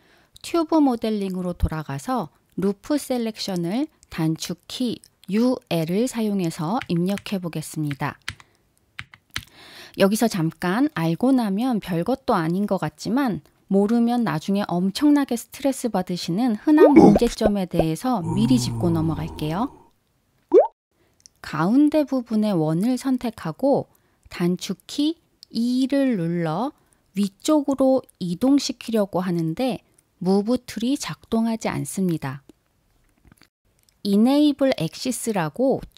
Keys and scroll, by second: 0.3 u, 2.1 l.